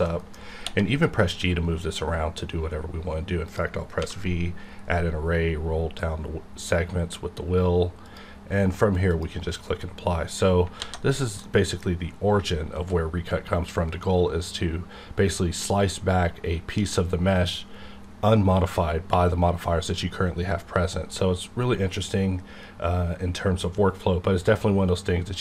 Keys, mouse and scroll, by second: 0.0 middle click, 0.6 g, 3.5 click, 4.0 v, 4.9 scroll down 1, 8.0 click, 9.8-10.6 scroll down 1, 10.7 alt+a, 11.4-25.4 middle drag.